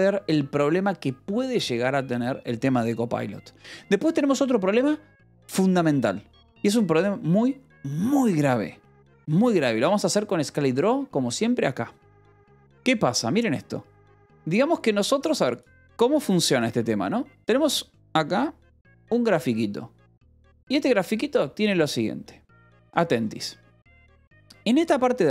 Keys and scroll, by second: 8.4 e, 8.6 x, 9.1 Return.